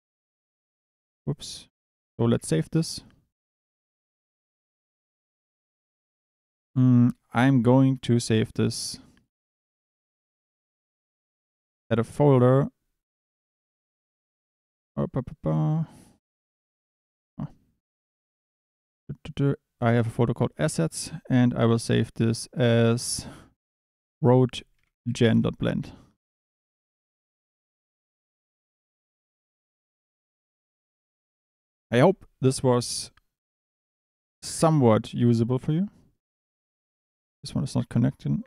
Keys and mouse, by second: 0.5 ctrl+s, 1.7 Tab, 2.0 click, 2.3 ctrl+s, 28.9 middle click, 29.7 click, 30.0 click, 31.3-36.0 drag, 37.3 Tab, 37.9 g, 38.4 click.